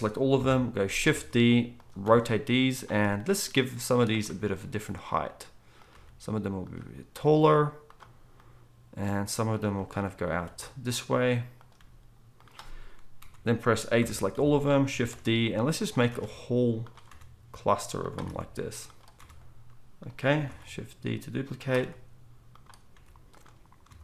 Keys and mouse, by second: 0.3 KP_7, 1.1 shift+d, 2.0 r, 4.5 g, 5.9 g, 10.4 r, 11.8 g, 13.2 KP_4, 14.0 KP_7, 14.3 a, 15.1 shift+d, 16.2 shift+d, 18.3 shift+d, 19.2 r, 20.4 shift+d, 21.8 r, 22.9 g.